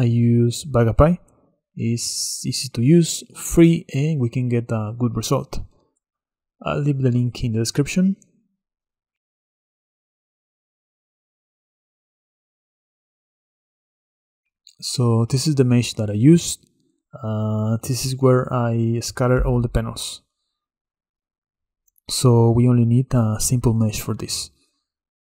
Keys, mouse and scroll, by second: 1.7 middle click, 2.1 scroll down 2, 2.4-10.1 shift+middle drag, 10.1 click, 13.7 click, 14.4-15.5 middle drag, 15.5 KP_Divide, 16.0 middle click, 16.4-16.7 scroll up 3, 16.8-19.1 middle drag, 19.1 scroll down 4, 19.4-22.0 middle drag, 22.0 click, 22.6 middle click, 23.4 KP_Divide, 24.1 click, 24.7-25.4 scroll down 3.